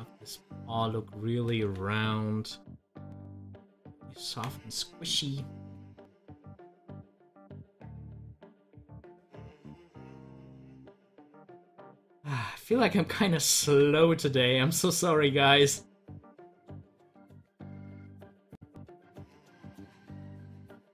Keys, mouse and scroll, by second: 2.4-5.8 drag, 5.8 scroll down 1, 9.6 scroll up 1.